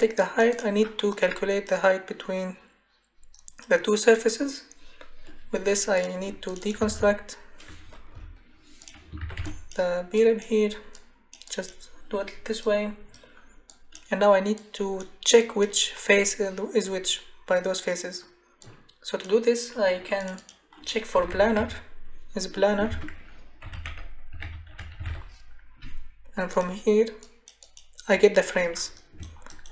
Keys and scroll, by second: 6.5-8.1 typing, 9.2 ctrl+c, 9.4 ctrl+v, 20.9-22.1 typing, 22.9 ctrl+a, 23.4-26.1 typing.